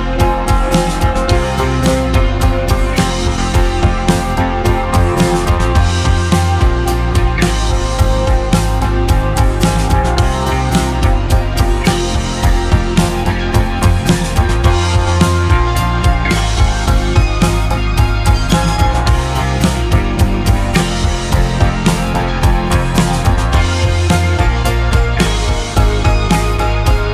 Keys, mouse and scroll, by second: 0.4 p, 1.0 p, 1.8 Tab, 3.0 click, 3.4 click, 5.6-7.8 drag, 6.8 ctrl+r, 7.8 Tab, 8.5 ctrl+r, 9.3 ctrl+r, 11.0 ctrl+b, 15.6 click, 16.0 Tab, 16.7-17.1 scroll down 1, 17.1-18.0 middle drag, 18.0-18.6 scroll down 1, 18.6-21.0 ctrl+middle drag, 21.4 Tab, 22.0-23.3 scroll up 1, 23.3-24.6 shift+middle drag, 24.6 3, 25.1 click, 25.7-27.1 shift+middle drag.